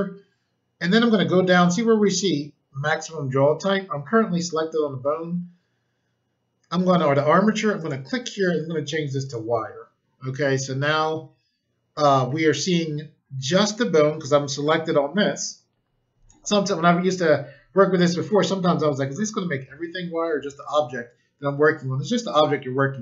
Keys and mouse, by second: 7.7 click, 9.1 click.